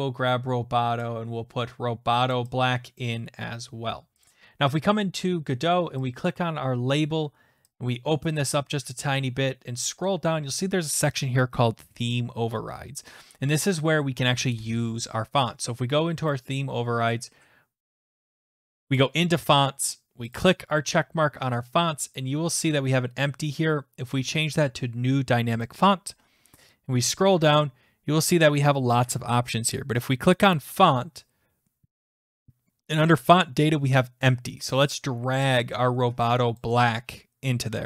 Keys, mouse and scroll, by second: 0.0 click, 2.3 click, 3.0 click, 4.3 click, 6.1 click, 8.6 click, 9.2-10.2 scroll down 6, 16.3 click, 18.0 click, 19.0 click, 20.4 click, 22.2 click, 25.5 click, 25.6 click, 26.2-26.5 scroll down 4, 27.3-30.6 scroll, 30.8 click, 36.6 click.